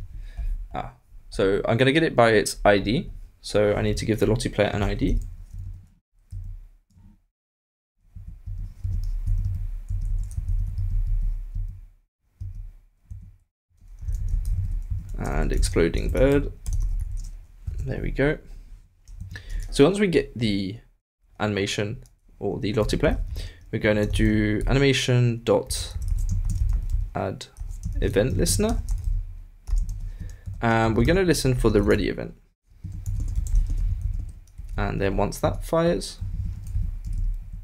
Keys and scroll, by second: 10.4 alt+BackSpace, 14.3 shift+=, 14.4 shift+', 15.1 shift+Left, 17.6 super+d, 17.6 super+s, 26.1-31.4 typing, 33.2-35.4 typing, 36.2 shift+Right.